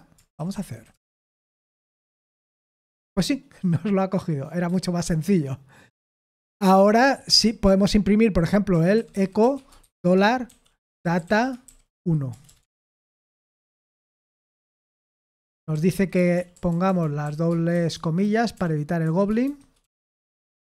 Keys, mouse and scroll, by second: 0.0-1.4 typing, 1.4 ctrl+p, 1.9 Return, 6.1 ctrl+p, 6.4 ctrl+p, 6.9 Return, 7.5-13.6 typing, 13.9 Escape, 15.5-20.8 typing, 20.6 Delete.